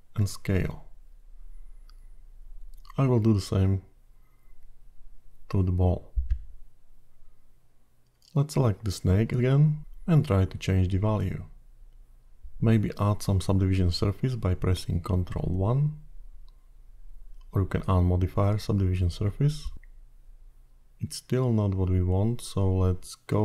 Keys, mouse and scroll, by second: 2.4 click, 3.8 q, 8.2 click, 11.5 click, 14.7 click, 16.1 ctrl+1, 19.7-20.5 scroll up 3, 20.5-22.8 scroll down 3, 22.8 middle click.